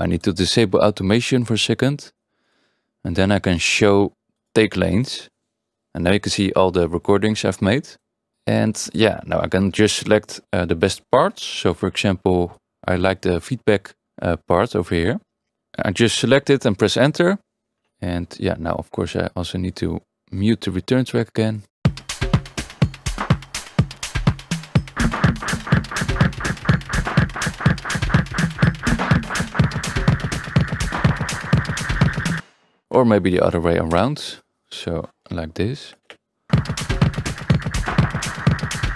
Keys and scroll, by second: 21.8 space, 32.3 space, 33.9 Return, 36.1 Return.